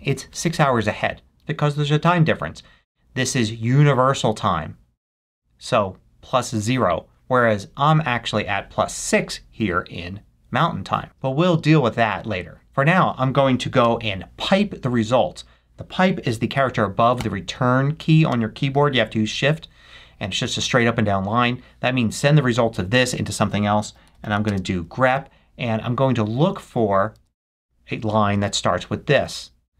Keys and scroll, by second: 12.6 Down, 13.7 space, 17.2 shift+\, 18.2 shift+space, 23.6-24.5 typing, 27.1 super+c.